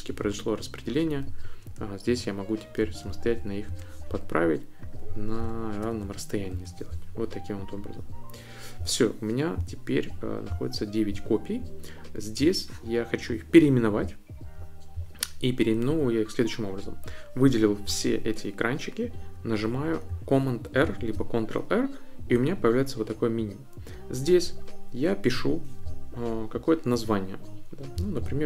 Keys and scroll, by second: 2.0-3.6 typing, 3.7 Return, 5.1-6.7 typing, 20.8 super+r, 27.7-28.4 typing.